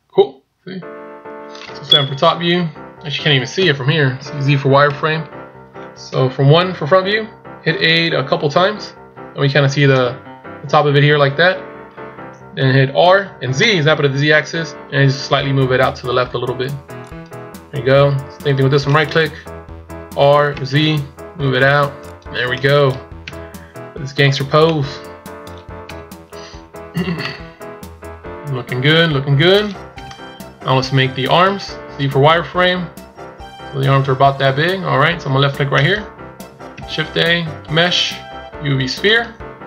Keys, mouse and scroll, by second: 2.0 KP_7, 3.6 z, 6.1 KP_1, 7.5 KP_8, 8.1 KP_8, 10.3 scroll down 1, 11.1 scroll down 4, 13.1 r, 18.9 right click, 20.2 r, 22.5 scroll down 2, 23.1 scroll down 1, 23.1 KP_1, 23.8 scroll up 3, 24.6 middle click, 25.9 KP_1, 27.2 middle click, 29.8 KP_1, 30.9 shift+scroll up 4, 31.9 z, 34.6 z, 35.6 click, 36.6 shift+a.